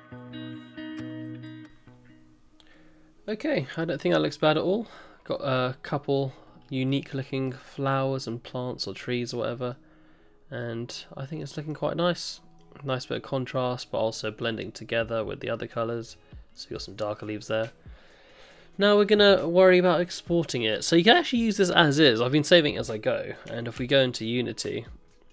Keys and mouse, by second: 0.0-1.0 typing, 0.1 shift+middle click, 0.2 middle click, 0.3 middle click, 0.4 middle click, 0.5 middle click, 0.6 middle click, 0.6 middle click, 0.8 middle click, 0.9 click, 1.0 shift+click, 3.8-4.9 drag, 6.9-7.4 middle drag, 7.9-9.6 middle drag, 9.7-11.4 middle drag, 11.7-12.3 middle drag, 12.6-12.9 middle drag, 13.8-14.4 middle drag, 15.7-16.0 middle drag, 17.1-17.5 middle drag, 23.8 ctrl+s.